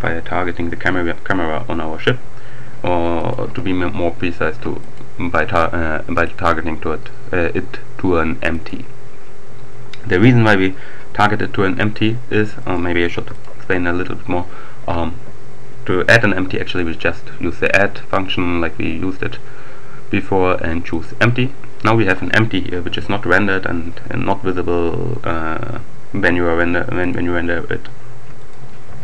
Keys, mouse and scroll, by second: 0.0 ctrl+alt+Left, 0.8-2.2 drag, 3.1 click, 4.8 click, 6.2 click, 8.6 click, 10.0 right click, 12.6 right click, 13.0 x, 13.2 click, 15.9-17.3 drag, 20.2-21.6 drag, 23.0 g, 27.0 click, 28.2 right click, 28.8 g.